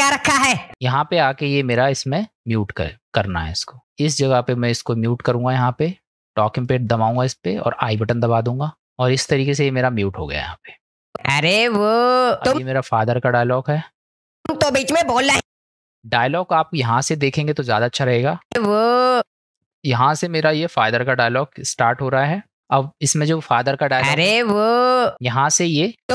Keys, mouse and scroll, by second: 0.7 space, 0.7 middle click, 1.8 middle click, 2.2 middle click, 3.8 click, 3.8 space, 6.6 click, 11.2 space, 12.6 space, 13.4 middle click, 14.4 space, 15.4 space, 16.1 middle click, 17.7 click, 18.5 space, 19.2 space, 20.9 click, 22.3 middle click, 23.9 space, 25.1 space, 25.6 click, 26.0 space.